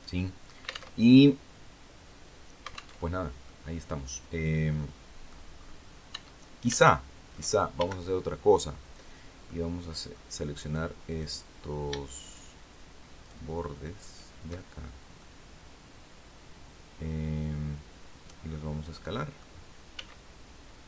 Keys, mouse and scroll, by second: 0.1 alt+click, 0.4 alt+Tab, 2.5 alt+Tab, 2.9-4.1 drag, 4.2 click, 5.1-5.4 scroll up 1, 5.6 Tab, 6.3 shift+click, 7.2 shift+a, 7.6 shift+scroll up 1, 8.9 click, 10.1 right click, 10.6 right click, 11.5 shift+right click, 12.7 shift+right click, 13.5 shift+right click, 14.3 shift+scroll down 1, 14.7-19.0 drag, 19.4 s.